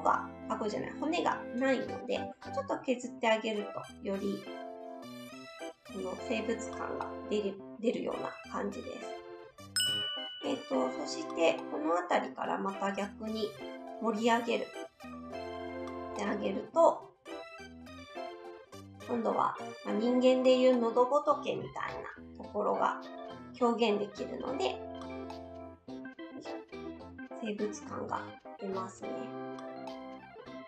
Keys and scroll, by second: 9.9 s, 21.6 s, 23.3 s, 27.9 s.